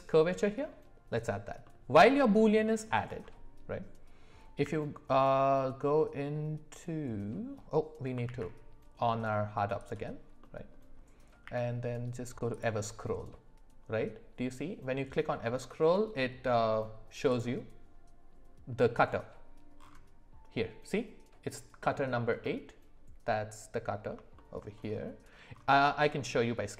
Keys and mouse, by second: 1.6 middle click, 2.6 shift+middle click, 4.6 q, 8.3 alt+w, 9.8 click, 10.4 middle click, 11.4 q, 22.4-24.1 middle drag, 24.3 shift+middle drag, 25.9 middle click.